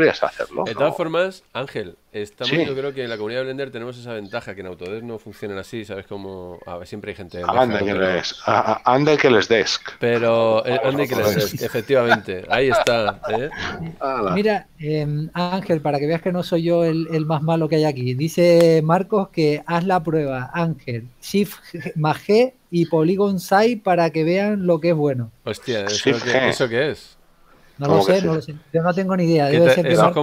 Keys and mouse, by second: 7.1 shift+middle click, 9.2 shift+middle click, 11.1 middle click, 15.4 shift+middle click, 19.1 middle click, 28.2 click.